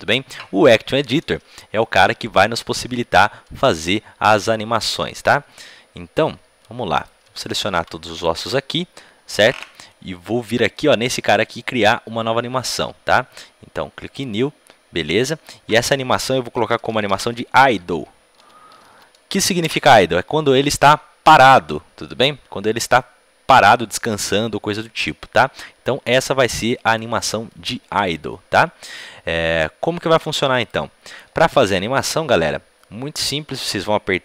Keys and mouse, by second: 6.9-14.1 right drag, 7.3 a, 7.7 a, 14.1-19.5 drag, 20.9-30.6 middle drag, 30.6-34.2 right drag.